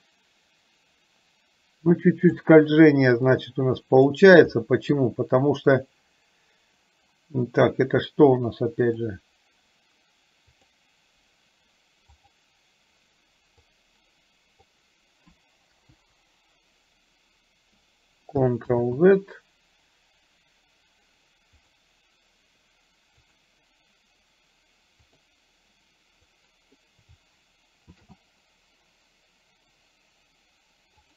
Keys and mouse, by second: 3.6 click, 4.6 middle click, 5.6 click, 9.1 click, 10.8 click, 12.4 click, 13.8-14.8 drag, 16.1 Delete, 19.0 ctrl+z, 21.9 click, 23.5 click, 26.4 click, 28.1 shift+d.